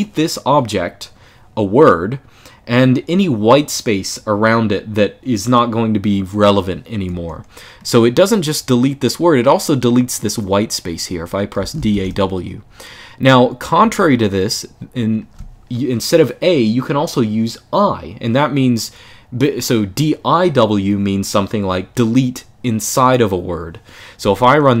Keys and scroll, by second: 11.1-12.2 typing, 13.5 typing.